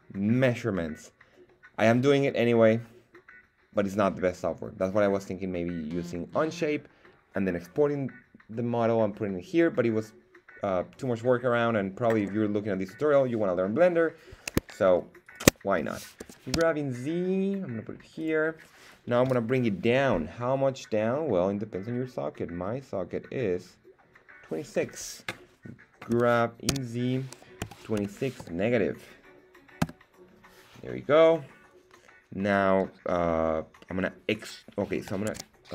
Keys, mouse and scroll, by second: 15.2 alt+shift+right click, 16.2 g, 16.5 z, 18.1 click, 26.1 g, 26.6 z, 27.6 KP_2, 27.9 KP_6, 28.3 KP_Subtract, 29.8 Return, 35.2 alt+Tab.